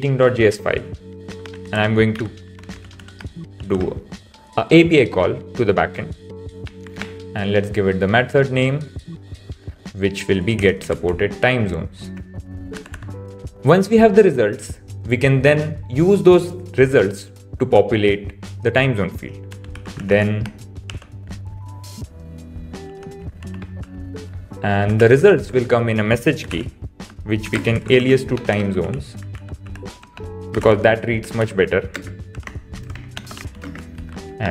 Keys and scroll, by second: 3.5 shift+(, 5.1 shift+9, 6.8 shift+', 10.6 super+c, 12.1 super+v, 12.8 Right, 20.8 shift+(, 23.5 shift+{, 28.3 BackSpace, 31.7 Right, 32.7 shift+<.